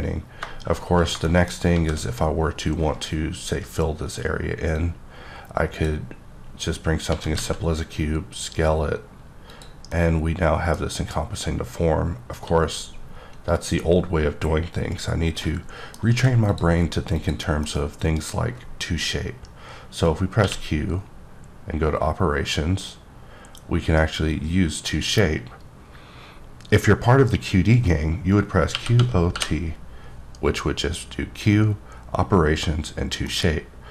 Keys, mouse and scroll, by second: 1.3 double middle click, 1.7 shift+a, 4.7 click, 7.1 s, 7.4 z, 9.9 middle click, 15.4 middle click, 15.7 middle click, 16.1 x, 16.5 click, 17.2 click, 17.6 middle click, 20.4 q, 28.7-29.3 typing, 33.3 middle click.